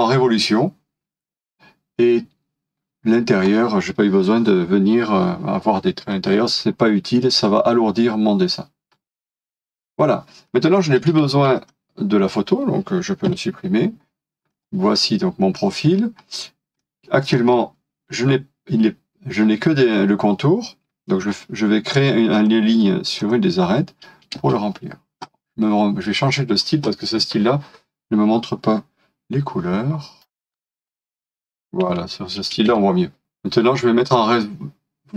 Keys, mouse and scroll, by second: 8.9-9.4 scroll down 1, 9.4 middle click, 11.3-13.3 scroll down 1, 13.3 Delete, 14.5-15.1 scroll up 1, 16.8 middle click, 17.5-19.1 scroll down 1, 21.2 |, 24.2-24.9 typing, 32.5 space, 33.2 middle click.